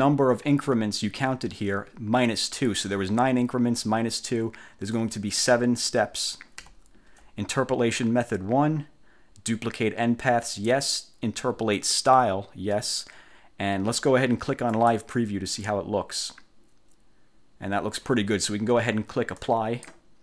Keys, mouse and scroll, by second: 5.1 click, 6.7 7, 14.9 click, 19.5 click.